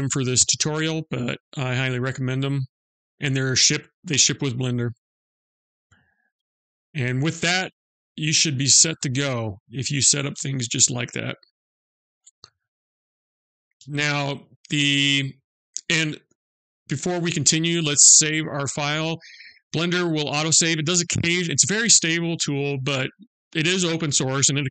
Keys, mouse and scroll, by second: 12.5 click, 13.6 ctrl+s.